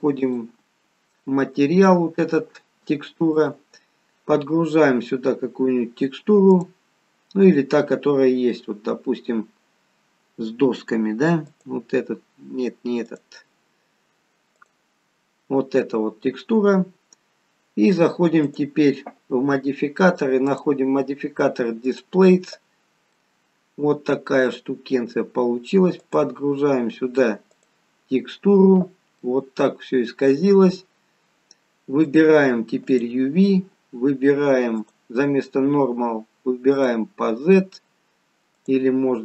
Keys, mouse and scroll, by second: 0.2 click, 3.4 click, 6.6 click, 13.1 click, 18.5 click, 20.5 click, 23.3 middle click, 26.1 click, 29.3 middle click, 32.2 click, 38.7 click.